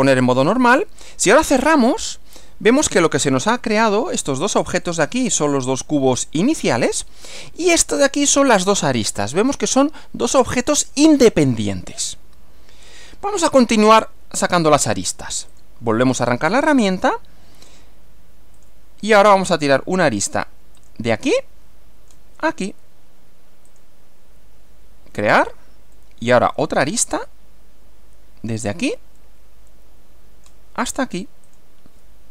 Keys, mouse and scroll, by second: 0.3 click, 1.7 click, 3.2 middle click, 4.9 click, 5.7 click, 7.8 click, 8.7 click, 15.5 click, 17.7 click, 18.6 click, 20.8 click, 21.4-22.3 middle drag, 23.7 ctrl+click, 25.2 click, 26.0-27.1 middle drag, 28.6 click, 29.2-30.7 middle drag, 31.5 ctrl+click.